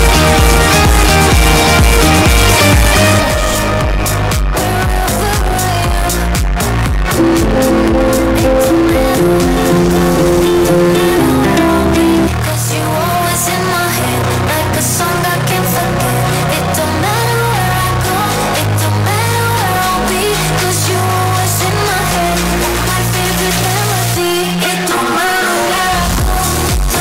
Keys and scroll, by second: 12.8 Page_Down.